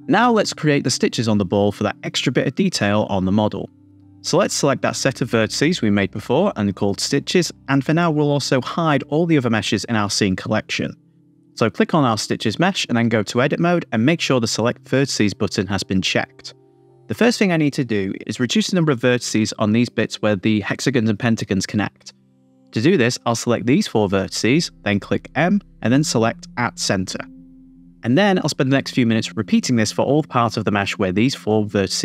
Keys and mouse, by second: 7.2-11.4 drag, 11.4-11.7 middle drag, 11.7 Tab, 11.8 Tab, 13.1 click, 13.6 Tab, 15.5 click, 17.1 middle click, 19.2-21.3 drag, 22.8 middle click, 23.9 middle click, 25.1 click, 26.8 m, 27.9 click, 28.1 middle click, 28.1 m, 28.3 click, 28.5 middle click, 28.7 click, 29.3 middle click, 29.3-32.0 typing, 29.5 click, 30.1 click, 30.3 middle click, 30.7 middle click, 31.5 middle click, 31.9 middle click.